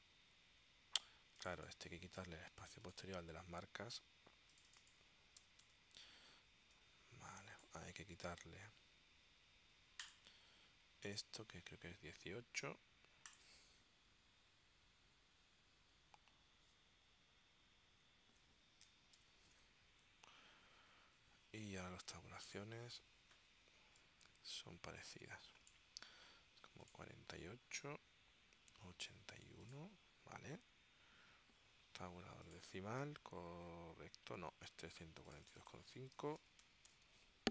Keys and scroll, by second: 5.5 0, 5.8 Tab, 19.3 ctrl+alt+super+p, 36.1-37.5 typing.